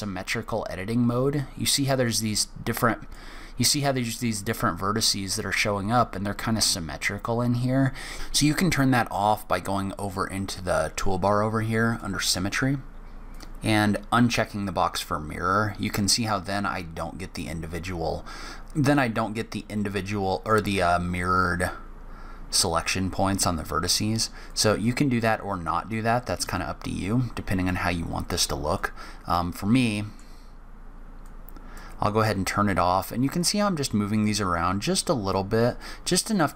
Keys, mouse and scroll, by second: 2.0 click, 4.3 click, 11.7 click, 13.1 click, 18.6 middle click, 24.3 click, 26.3 click, 28.5 click, 29.4 scroll down 1, 29.5 middle click, 31.0 click, 33.2 click, 35.6 click.